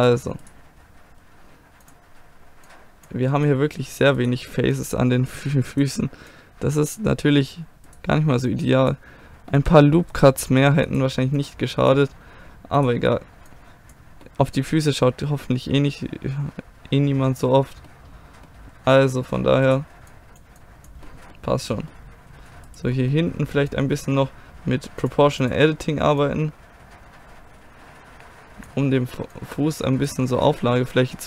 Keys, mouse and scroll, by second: 1.9-6.4 drag, 1.9-3.1 right drag, 4.2-6.4 right drag, 7.2-8.9 drag, 9.6 click, 9.8 middle click, 10.1 click, 10.2-11.4 middle drag, 12.6 click, 14.3-17.4 middle drag, 17.7 middle click, 19.7-21.8 right drag, 20.2-22.7 drag, 22.7-23.7 middle drag, 23.7-28.7 drag, 23.7-26.1 right drag, 29.4-30.6 drag, 30.6 middle click.